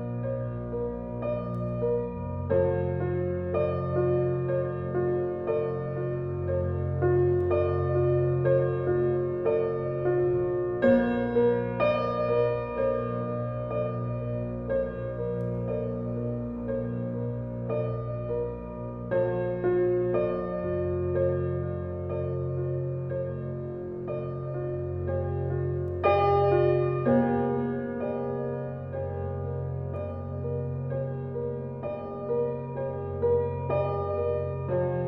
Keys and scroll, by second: 34.3 2, 34.4 0.